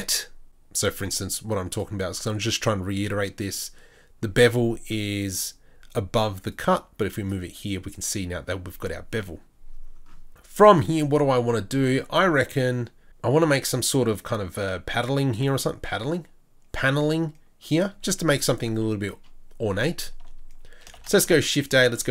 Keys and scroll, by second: 18.8 KP_3, 21.0 shift+a.